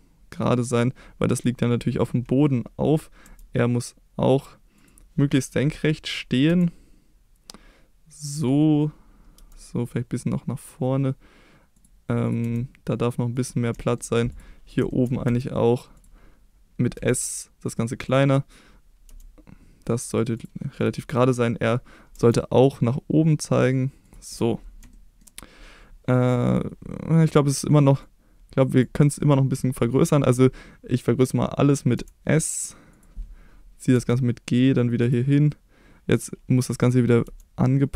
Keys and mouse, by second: 0.7 click, 3.2 r, 4.7 click, 6.5 s, 8.3 click, 9.3 g, 11.7 click, 12.4 g, 13.3 click, 13.8 shift+middle click, 14.9 shift+middle click, 15.2 g, 15.9 click, 16.9 s, 17.7 click, 18.0 click, 19.0 g, 20.3 click, 22.1 r, 24.0 click, 24.9 shift+middle click, 28.2 click, 31.9 s, 32.9 click, 33.9 g, 35.0 click, 36.1 click, 36.8 click, 37.2 g.